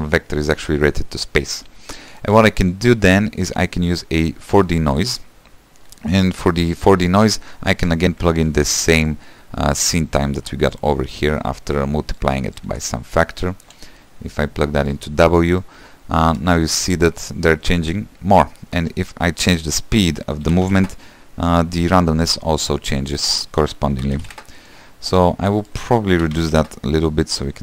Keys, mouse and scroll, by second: 1.6 space, 3.5-6.4 drag, 6.4 space, 7.7 space, 15.0 click, 15.7 middle click, 16.4 space, 19.2-19.8 scroll up 5, 19.8-22.4 drag, 22.4-23.4 middle drag, 23.4-27.6 drag.